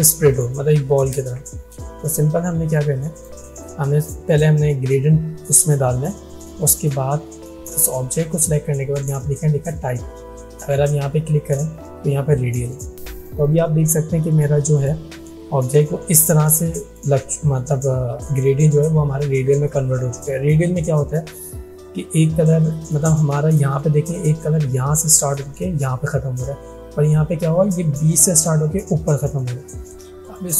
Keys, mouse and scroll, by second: 1.5 ctrl+z, 3.2 click, 10.9 click, 13.5 click, 16.6 space, 16.8 click, 17.2 space, 30.3 click.